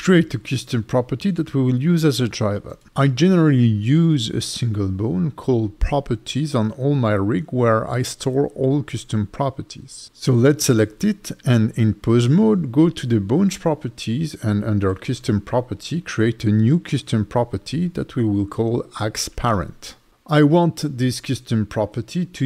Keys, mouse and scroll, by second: 0.1 click, 6.7 click, 12.5-14.4 scroll down 5, 14.4 click, 17.2-17.6 scroll down 3, 20.5 click, 21.7 BackSpace, 21.8 BackSpace.